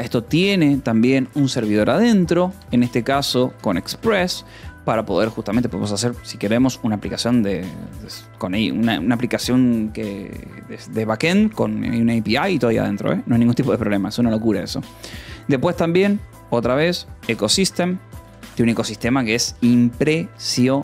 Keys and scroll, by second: 0.0-4.1 typing, 1.6 ctrl+s, 4.7 ctrl+s, 7.1 o, 7.7 :, 7.8 space, 12.0 space, 16.9-19.1 typing, 20.1 -, 20.4 space.